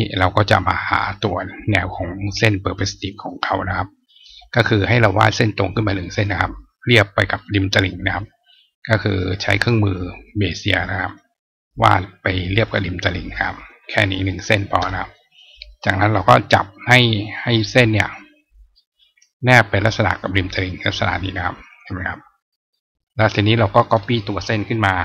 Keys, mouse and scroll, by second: 1.7 click, 3.1 click, 6.0 click, 7.2 click, 8.9-10.1 drag, 10.9 click, 12.5 click, 13.7 click, 15.5 click, 17.2-18.4 drag, 20.7 click, 23.4 click.